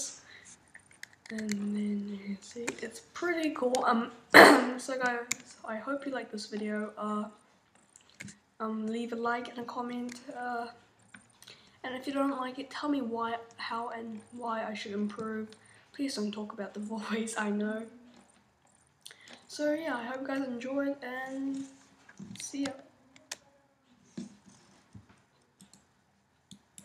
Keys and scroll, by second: 22.7 shift+super+Up.